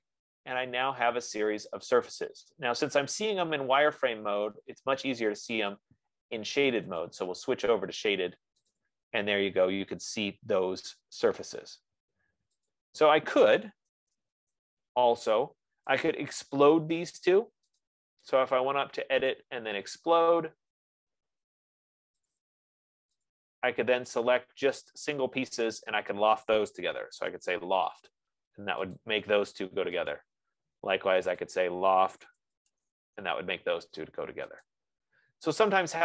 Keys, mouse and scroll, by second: 6.2 click, 7.5 click, 9.1 click, 13.4 click, 14.2 d, 14.9 Return, 16.5 click, 18.2 shift+click, 20.0 click, 22.8 click, 23.5 click, 24.6 click, 26.1 shift+click, 26.9-28.1 typing, 29.3 click, 30.4 click, 30.5-35.2 typing, 31.7 shift+click, 35.0 click.